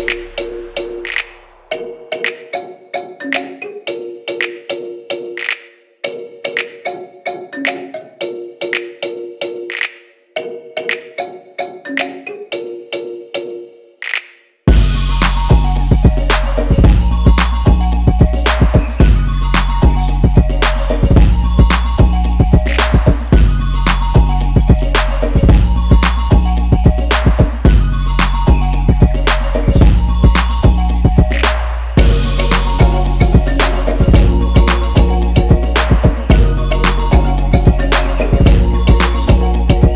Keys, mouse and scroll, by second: 0.0-22.6 drag, 23.3-32.1 drag, 34.0-34.7 scroll down 1, 34.7 scroll down 1, 37.4-37.8 scroll down 2, 37.8-39.9 shift+middle drag.